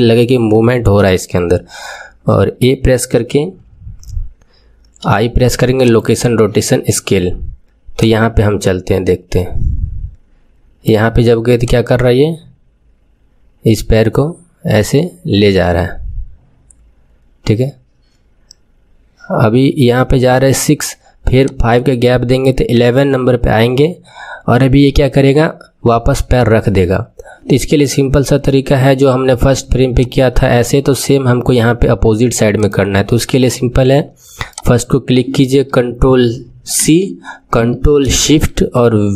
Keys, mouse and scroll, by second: 2.4 a, 8.0-10.9 drag, 11.6-14.6 drag, 21.4-28.1 drag, 30.0-32.6 drag, 34.4 click, 36.8 ctrl+c.